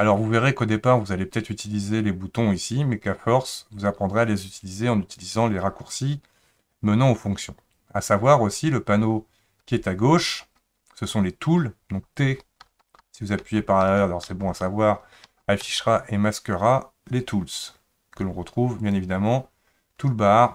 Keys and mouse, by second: 12.2-14.2 typing, 15.3 t, 15.6 t, 18.9-20.5 drag.